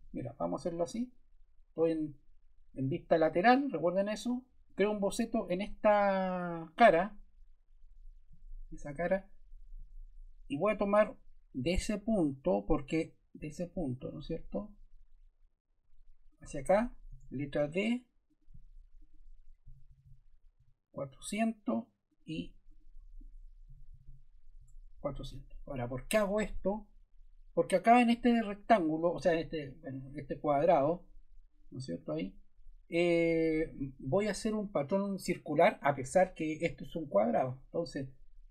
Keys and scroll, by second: 17.0 d, 19.4-20.3 typing, 20.5 Return, 23.4-24.4 typing, 24.5 Return.